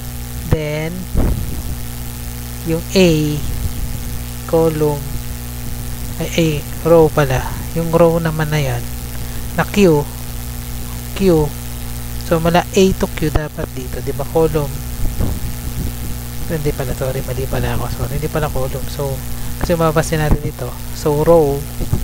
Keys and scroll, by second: 4.8 Right, 6.0 Left, 14.0 Left, 17.3 BackSpace.